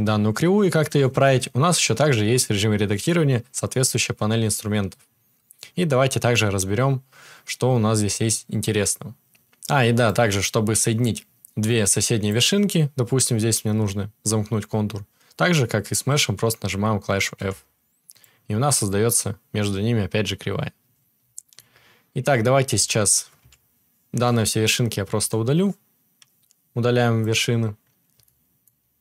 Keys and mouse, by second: 17.3 f, 22.2 Tab, 22.7 Tab, 23.4 a, 25.1 Delete.